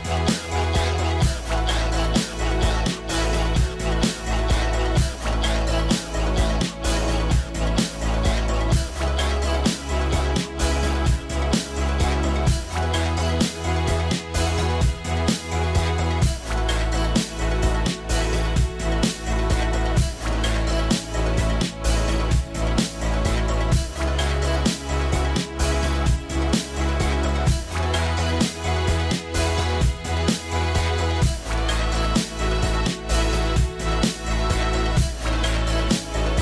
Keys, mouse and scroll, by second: 4.1-5.4 scroll up 1, 7.2 scroll up 1, 7.3 middle click, 9.6 right click, 20.4 middle click, 31.0 middle click.